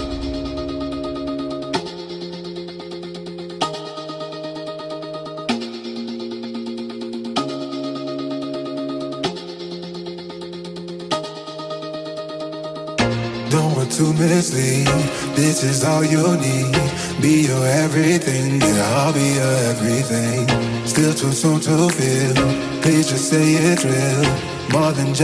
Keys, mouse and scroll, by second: 0.3-0.7 scroll down 2, 0.7-1.3 middle drag, 1.3-1.9 scroll up 2, 1.9-2.3 scroll down 2, 2.3-3.6 middle drag, 3.6 KP_1, 4.5-5.5 scroll up 2, 5.5 space, 5.6 space, 6.7 space, 7.2 shift+Left, 7.6 Right, 9.9 Left, 12.8-15.3 drag, 15.3 ctrl+s, 16.0 a, 16.6-17.2 scroll down 2, 17.2-18.1 scroll up 2, 18.1 click, 20.9 click, 22.2 click, 22.8-23.3 scroll up 2, 23.3 alt+a, 23.9 ctrl+s, 24.7 a.